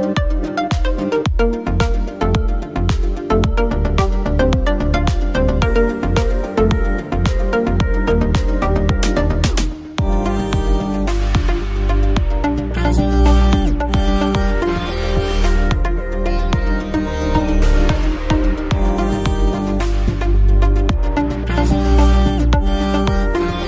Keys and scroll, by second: 2.5 shift+space, 19.6 shift+space.